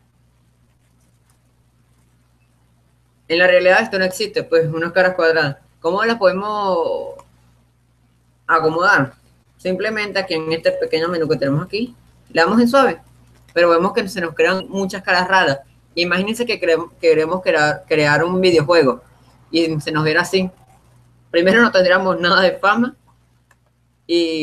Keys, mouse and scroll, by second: 0.3 0, 1.9 1, 3.1-6.3 middle drag, 7.5-10.0 drag, 12.6-14.2 drag.